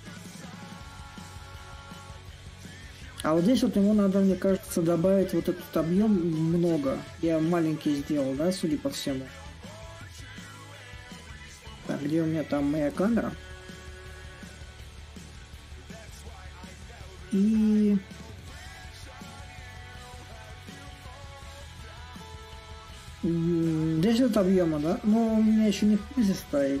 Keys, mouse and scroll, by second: 0.0-9.0 middle drag, 9.2-12.4 drag, 12.4 shift+a, 13.3-15.2 right drag, 15.2-19.4 drag, 19.4-21.8 right drag, 21.8-26.8 middle drag.